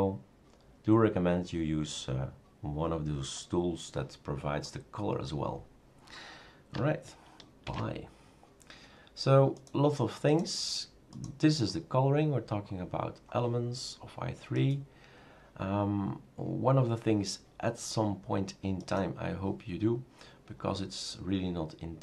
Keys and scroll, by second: 7.7 shift+super+q.